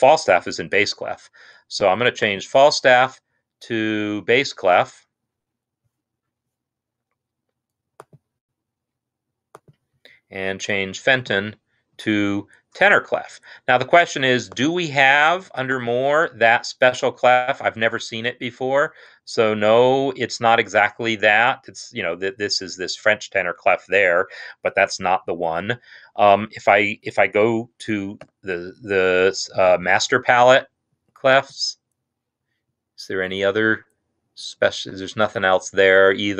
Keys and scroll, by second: 28.5 z.